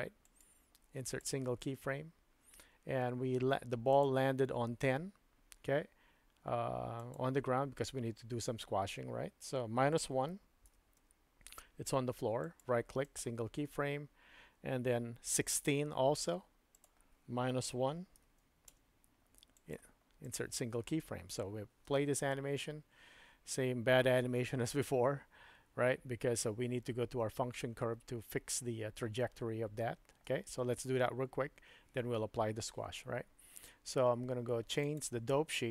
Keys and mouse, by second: 0.3 right click, 4.0 click, 7.1-12.6 drag, 12.6 middle click, 15.3 click, 16.9-19.7 drag, 19.7 middle click, 21.9 space, 30.2 space, 34.9-35.7 drag.